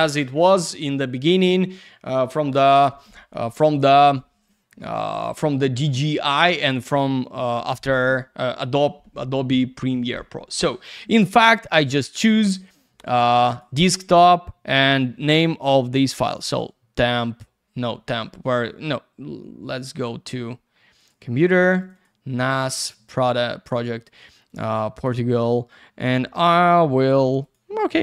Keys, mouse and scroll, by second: 11.6 click, 11.7 click, 13.5 click, 13.6 click, 16.4 click, 16.5 click, 21.0 click, 21.0 click, 21.8 click, 21.8 click, 21.9 click, 22.0 double click, 22.6 click, 22.7 click, 22.8 click, 22.9 double click, 24.4 click, 24.5 click, 24.6 click, 24.7 double click, 27.4 click, 27.5 click.